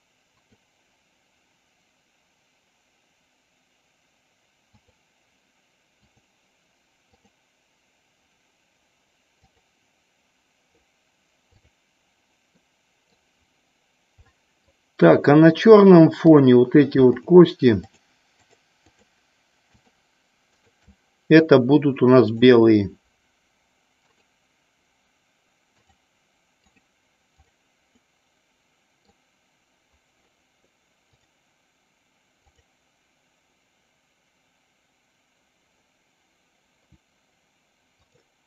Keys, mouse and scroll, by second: 0.4 click, 9.5 click, 12.6 middle click, 14.4 middle click, 17.3 shift+click, 18.4 shift+click, 19.1 shift+click, 19.8 shift+click, 22.4 click, 24.2-26.0 drag, 26.8 click, 27.4 click, 28.2-29.3 middle drag, 32.5 click, 38.1 click.